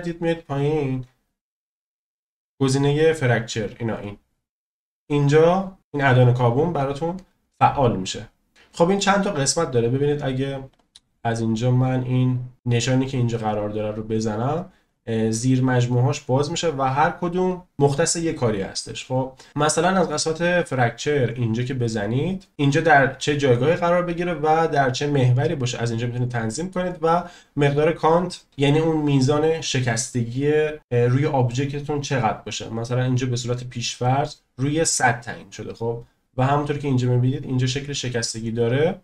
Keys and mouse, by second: 10.7 click, 12.5 click, 16.2 click, 21.1 click.